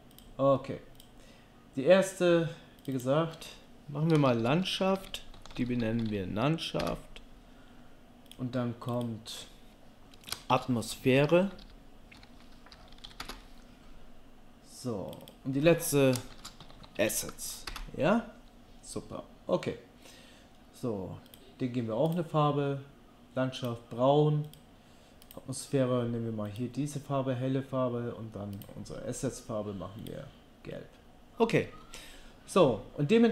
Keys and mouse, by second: 1.0-2.8 drag, 2.8 click, 8.3 click, 8.9 click, 15.1 click, 16.7 s, 21.3-24.4 drag, 24.5-33.3 drag.